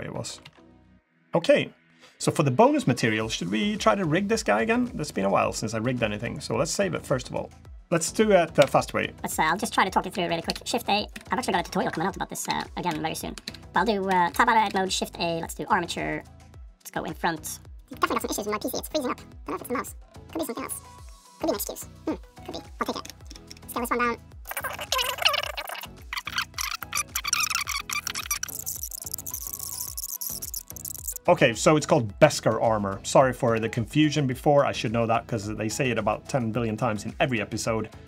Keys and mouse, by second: 0.2 ctrl+z, 0.5 click, 1.1 click, 4.5 drag, 6.8-7.7 drag, 8.3 KP_1, 9.4 shift+click, 10.1 shift+click, 10.3 shift+a, 11.4 Tab, 11.7 Tab, 12.3 shift+a, 13.3 shift+a, 13.9 Escape, 14.1 Tab, 14.5 shift+a, 17.7 click, 18.8-20.4 drag, 20.5-22.9 drag, 22.9 Tab, 23.2-30.4 typing, 24.5 drag, 24.8 drag, 25.3 click, 25.7 click, 26.5 middle click, 26.9 click, 27.3 click, 27.6 click, 27.8 F2, 28.1 F2, 28.4 F2, 28.5 F2, 29.0 super+Return, 29.1 F2, 29.3 F2, 29.5 alt+p, 29.6 F2, 30.0 ctrl+Tab, 30.0 click, 30.2 ctrl+Tab.